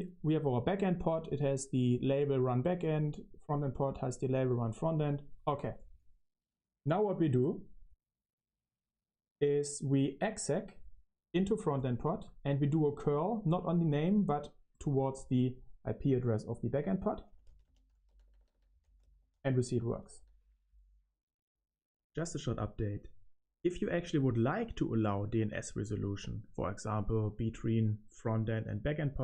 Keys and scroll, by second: 16.9-20.6 typing.